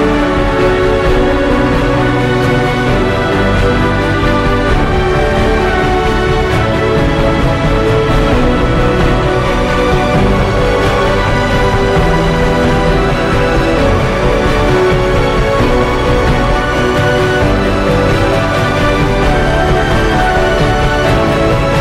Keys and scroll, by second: 0.6 ctrl+j, 2.3 ctrl+t, 12.9 b, 13.4 space, 13.5 ctrl+z, 13.6 [, 14.2 ctrl+z, 17.9 ctrl+i, 19.2-21.0 typing.